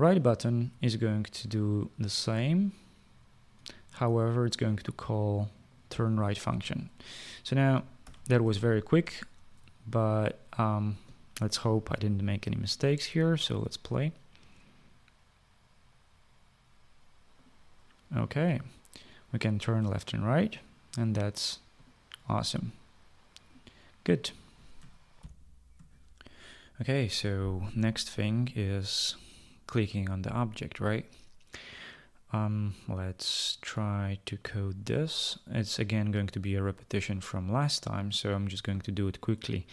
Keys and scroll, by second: 8.2 ctrl+s, 25.5 shift+F9, 25.6 shift+F9.